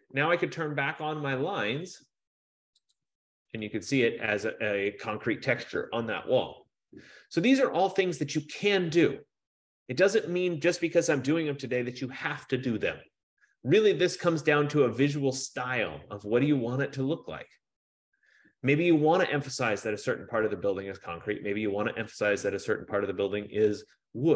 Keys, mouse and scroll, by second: 3.1 click.